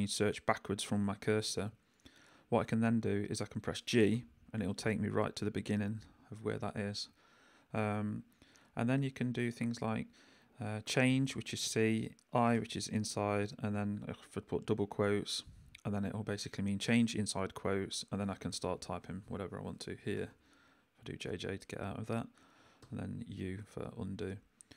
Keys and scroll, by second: 4.1 g, 11.1 c, 12.5 i, 14.6 shift+', 18.0-20.1 typing, 22.8 u.